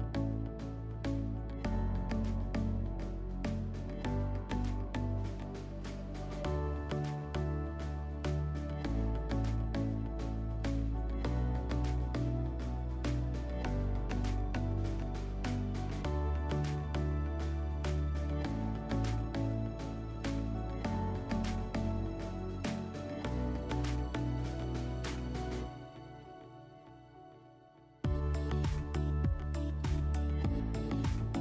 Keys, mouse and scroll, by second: 4.3-5.9 drag, 8.5-10.0 drag, 11.2-12.7 drag, 13.2-14.8 drag, 16.8 click, 17.1 click, 17.2-18.4 drag, 19.6 /, 22.0 /, 24.0 click, 24.7-25.7 typing, 29.7 click, 30.4 /.